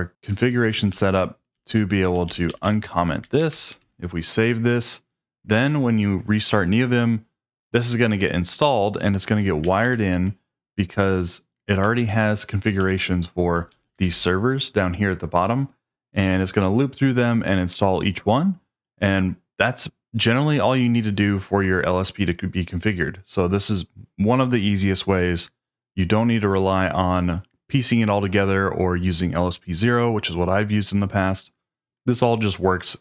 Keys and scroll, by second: 0.7-4.0 typing, 3.8 Return, 9.8 ctrl+d, 12.0 ctrl+d, 12.8 ctrl+d, 13.7-15.5 typing.